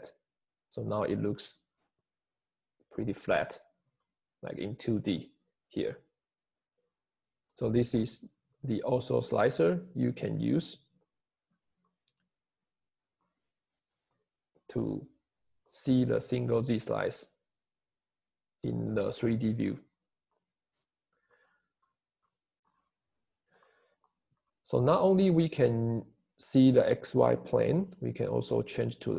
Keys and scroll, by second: 14.0 1, 14.2 Return.